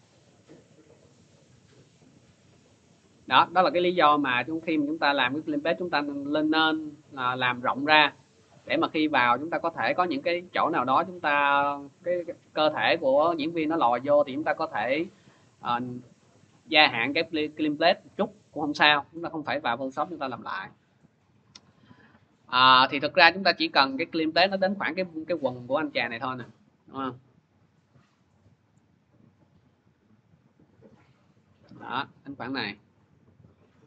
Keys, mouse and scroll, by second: 1.3 v, 2.7 click, 3.0 ctrl+z, 8.4 click, 10.1 click, 11.1 click, 21.0 click, 22.4 click, 22.9 click, 23.5 click, 26.3 click, 28.6 click, 29.0 scroll, 32.5 click, 32.8 middle click.